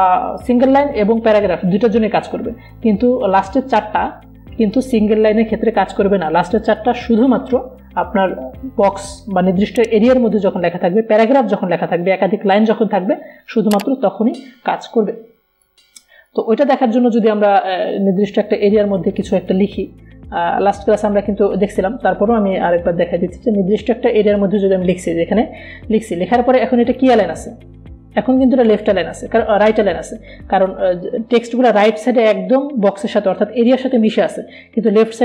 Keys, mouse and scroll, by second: 17.0 click, 18.7 Delete, 20.6 click, 21.2 Delete, 22.1-23.8 drag, 24.1-27.9 drag.